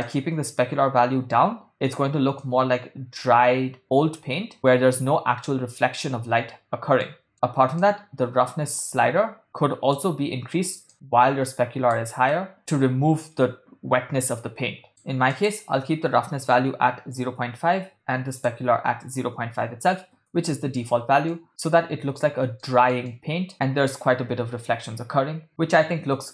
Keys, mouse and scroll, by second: 0.0-2.0 drag, 2.5-4.5 middle drag, 5.8-7.2 middle drag, 7.8 middle click, 7.9-10.0 drag, 10.9-12.1 drag, 12.5 middle click, 14.9 click, 15.7-17.4 drag, 18.3-20.2 drag, 21.4-22.3 middle drag, 22.7 ctrl+middle click, 23.1-26.3 middle drag.